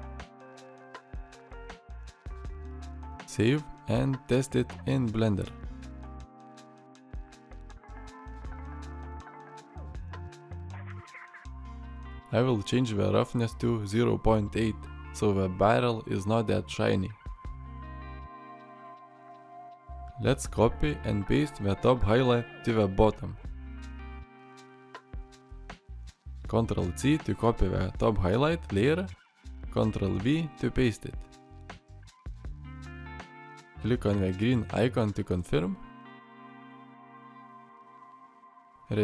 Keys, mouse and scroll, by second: 7.2 alt+r, 8.2-9.8 middle drag, 10.3-10.7 middle drag, 10.9 scroll up 1, 11.0-12.1 middle drag, 17.7-19.4 middle drag.